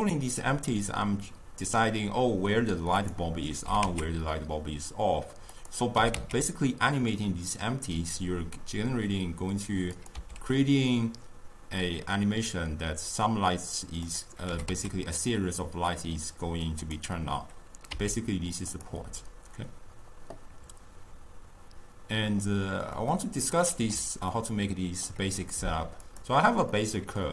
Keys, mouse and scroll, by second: 3.7 g, 6.0 g, 10.3 s, 14.5 g, 18.0 s, 23.2 scroll down 2, 23.3-26.1 middle drag, 26.1 click, 26.8-27.3 middle drag.